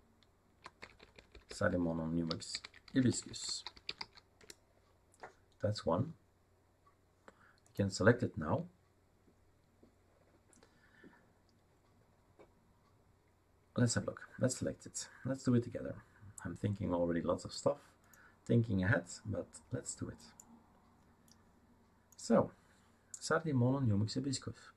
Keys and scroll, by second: 0.0-4.5 typing.